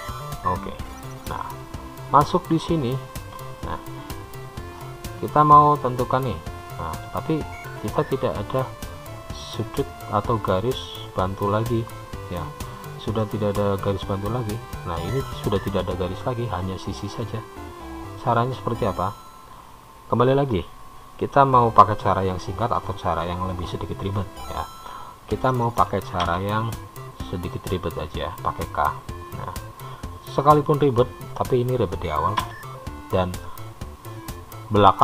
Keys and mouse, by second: 2.2 click, 5.9-7.4 middle drag, 13.8-16.2 middle drag, 26.5 k.